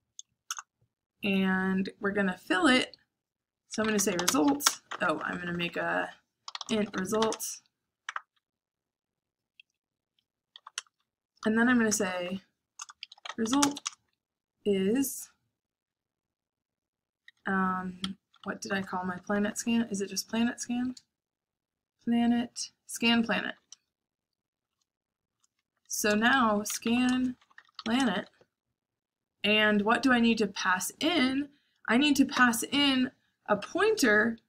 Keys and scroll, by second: 0.4 Return, 3.5-5.8 typing, 7.1-8.0 typing, 10.5-14.8 typing, 11.3 Return, 17.3-20.8 typing, 17.9 Escape, 22.3 shift+[, 23.1 shift+], 23.8 shift+], 25.7-28.0 typing.